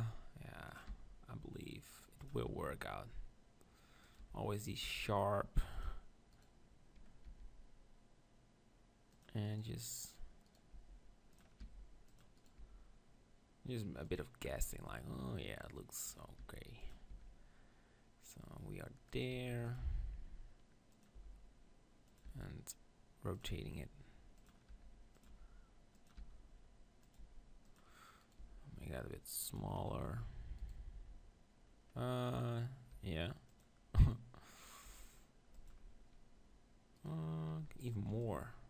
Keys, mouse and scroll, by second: 0.9 r, 2.5 g, 4.3 r, 4.9 g, 5.5-7.8 drag, 6.3-7.6 right drag, 7.2 g, 7.7 r, 7.8 right click, 9.4-14.3 right drag, 11.4-13.3 drag, 11.6 r, 12.6 g, 14.6 right click, 14.7 g, 16.1-18.7 drag, 16.1 right click, 16.5 r, 17.1 e, 19.2-23.9 drag, 19.3 r, 19.9 g, 21.2 e, 22.3 r, 23.7 g, 24.9 r, 25.3 g, 26.2 r, 27.1-31.4 drag, 28.2-30.0 right drag, 28.4 g, 30.0 r, 30.7-33.6 right drag, 33.5 r, 33.6 click, 34.8 g, 35.4 click, 37.9-38.6 right drag, 38.2-38.6 drag.